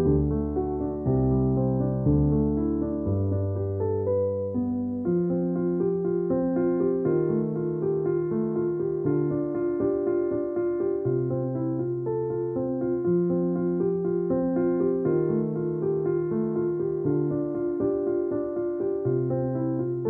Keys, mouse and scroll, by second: 0.0-1.3 typing, 3.6 typing, 5.3-7.8 typing, 6.5 click, 7.1 click, 9.0 ], 12.4 ], 15.9-16.5 typing, 17.9 ], 19.4 typing.